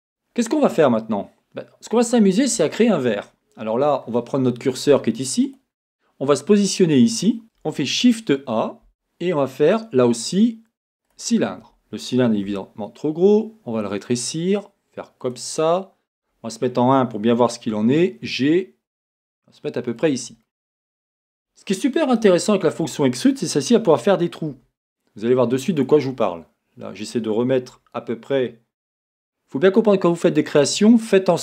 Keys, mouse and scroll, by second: 0.3-0.7 scroll, 5.5-7.4 drag, 12.5 s, 15.3 click, 17.7 g, 20.1 click, 20.5-25.9 middle drag, 21.2 scroll, 22.2 scroll, 24.5 s, 25.9 click, 26.3-27.7 middle drag, 29.0 g, 29.7 click, 29.7 right click, 30.9-31.4 middle drag.